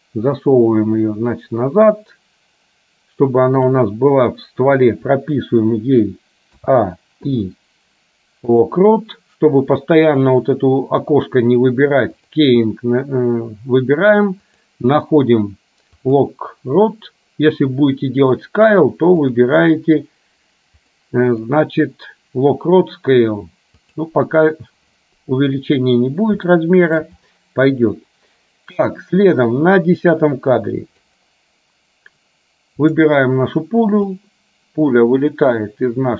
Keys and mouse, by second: 6.7 a, 7.4 i, 12.3-16.8 drag, 19.3-24.5 drag, 26.7 shift+middle click, 29.5-31.2 drag, 32.9 click, 34.3-36.1 drag.